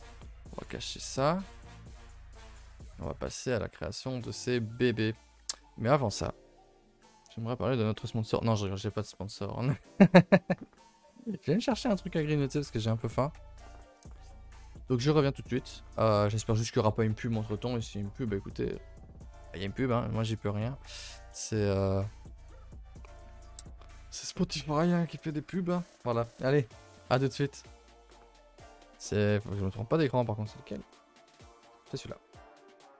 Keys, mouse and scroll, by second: 0.1 click, 0.9 h, 1.4 KP_0, 1.9 ctrl+s, 2.2 shift+middle drag, 2.4-2.8 scroll up 2, 2.8 shift+middle drag, 3.0-3.9 scroll up 1, 3.9 shift+right click, 5.3 ctrl+s, 7.2 ctrl+s.